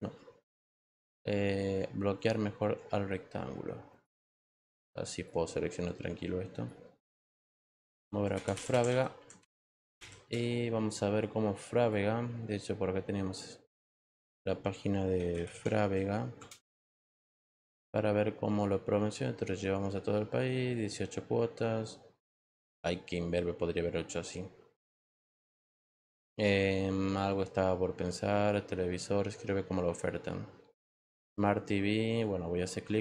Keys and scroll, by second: 14.9-16.2 typing, 16.3 Return.